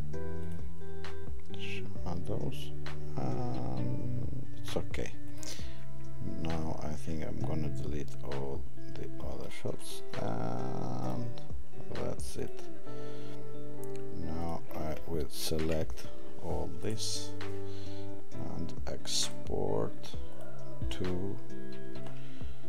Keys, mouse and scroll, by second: 12.4 click, 15.4 ctrl+a.